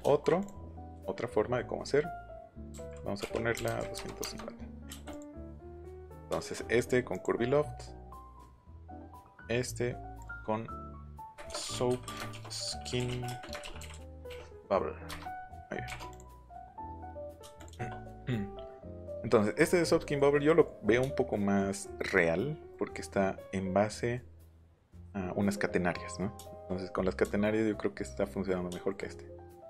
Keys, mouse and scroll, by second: 0.4 click, 2.7-4.8 typing, 4.2 KP_Enter, 5.1 click, 5.9 click, 7.1 click, 8.4 click, 9.2 click, 10.1 click, 11.4-14.7 typing, 15.0 Return, 15.8 BackSpace, 16.1 click, 17.5 click, 24.5 middle click, 26.4 shift+middle click, 27.1 shift+middle click, 28.7 shift+middle click.